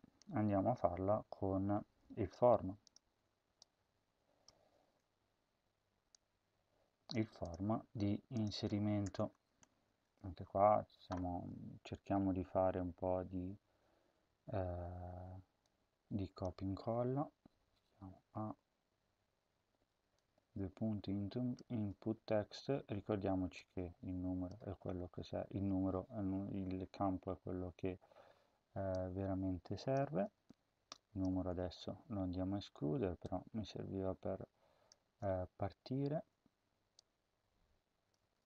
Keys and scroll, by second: 4.8 ctrl+c, 9.0 Return, 9.4 Home, 9.8 ctrl+v, 18.0 a, 21.6 ctrl+c, 24.6 ctrl+v, 30.0 ctrl+c, 31.2 ctrl+v, 35.0 ctrl+c, 38.2 ctrl+v.